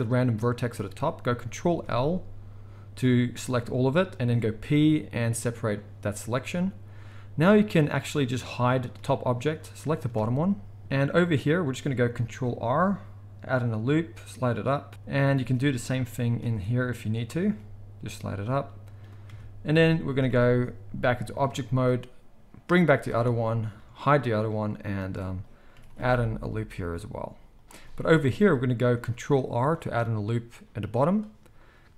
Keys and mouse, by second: 1.8 ctrl+l, 3.5 g, 4.7 p, 6.4 Tab, 7.7 click, 7.8-9.6 middle drag, 8.9 h, 9.6 click, 9.7-21.2 middle drag, 10.0 Tab, 12.3 ctrl+r, 15.3 ctrl+t, 16.4 ctrl+r, 19.2 Tab, 20.1 alt+h, 21.2 click, 21.3-31.9 middle drag, 21.8 h, 23.6 Tab, 24.9 ctrl+r, 29.5 ctrl+r.